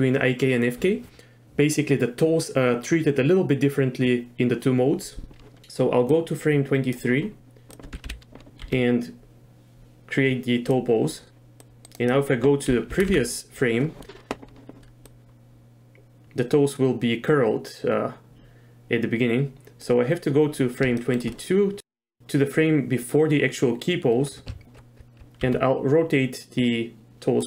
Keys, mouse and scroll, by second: 6.2 click, 7.7 click, 8.0 KP_3, 8.7 r, 11.6 click, 13.0 Left, 13.1 Left, 15.1-19.3 drag, 19.3 middle click, 21.0 shift+middle drag, 25.5 r.